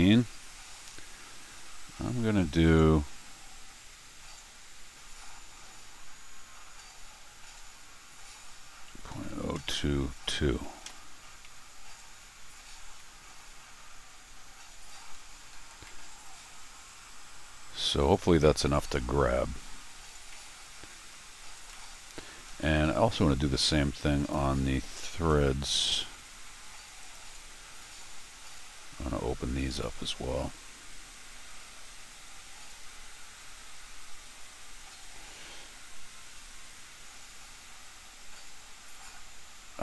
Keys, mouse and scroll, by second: 12.9 r, 15.8-18.4 middle drag, 18.9-21.1 scroll down 4, 21.7 middle click, 24.2 click, 27.0 click.